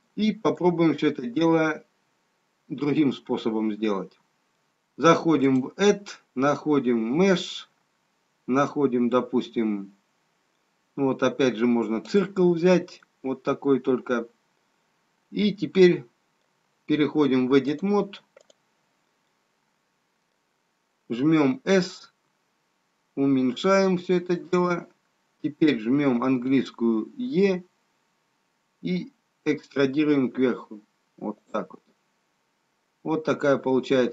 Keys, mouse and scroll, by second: 3.4 middle click, 5.4 click, 13.0 middle click, 17.6 click, 20.1 middle click, 22.0 s, 27.3 e, 31.9 scroll up 1, 33.8-34.1 scroll up 4.